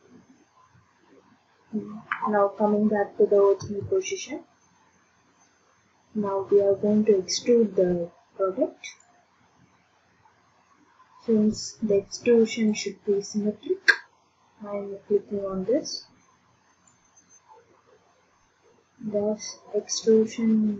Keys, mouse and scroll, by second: 3.6 ctrl+d, 4.0-8.6 drag, 12.7 click, 16.9 click, 19.9 click, 20.3 click.